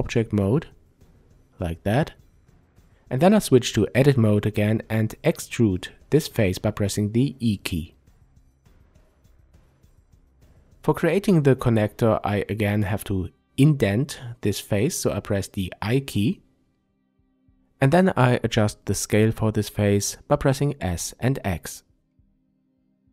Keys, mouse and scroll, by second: 0.9 Tab, 3.4 e, 5.7-6.4 scroll up 1, 6.4-10.7 shift+middle drag, 7.3-7.6 scroll up 1, 14.8 click, 15.1 middle click, 16.5-17.0 scroll up 1, 18.1 s, 22.1 click, 23.0 middle click.